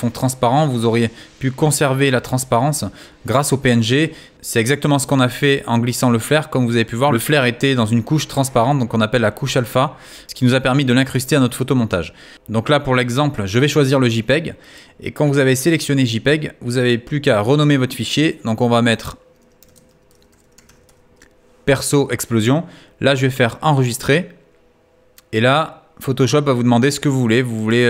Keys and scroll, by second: 19.0-19.9 typing.